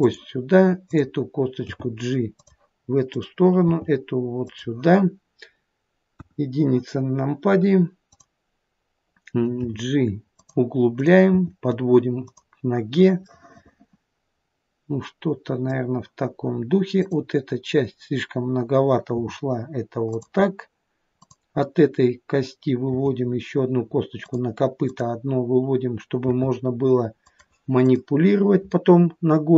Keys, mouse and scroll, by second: 0.9 click, 1.7 g, 3.2 click, 3.7 g, 6.2 KP_1, 8.1 click, 9.7 g, 11.0 click, 11.3 g, 13.4 middle click, 17.0 click, 19.1 g, 21.2 click, 22.9 e, 24.9 click, 26.3 e, 27.8 click.